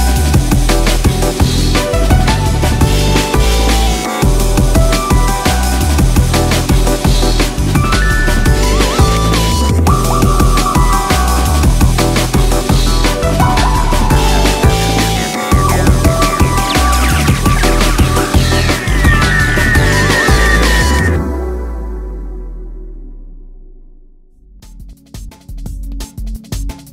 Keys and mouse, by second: 0.5-2.5 drag, 3.5-5.4 drag, 6.4-7.9 drag, 8.8-10.5 drag, 11.8-14.1 drag, 13.4 0, 15.0-16.8 drag, 16.2 0, 18.4-21.1 drag, 20.2 0, 22.7-23.9 drag, 26.0-26.9 drag.